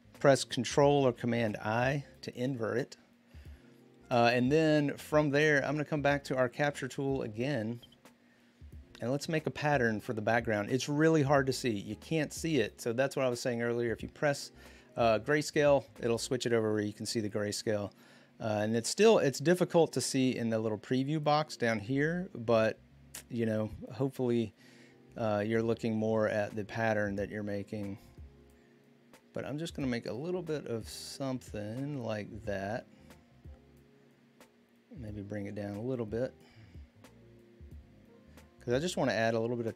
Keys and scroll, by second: 1.4 ctrl+i.